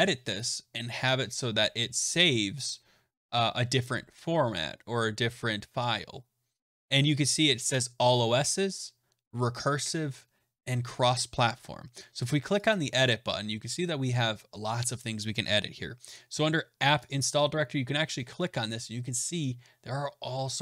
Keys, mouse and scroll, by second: 0.8 click, 7.6 click, 8.4 click, 12.6 click, 16.9 click.